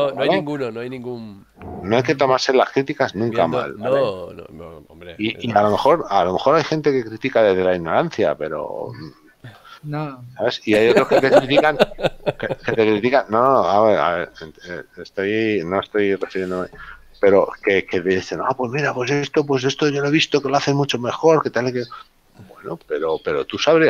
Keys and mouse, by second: 1.5 shift+middle click, 2.5 middle click, 8.2 middle click, 15.5 shift+middle click.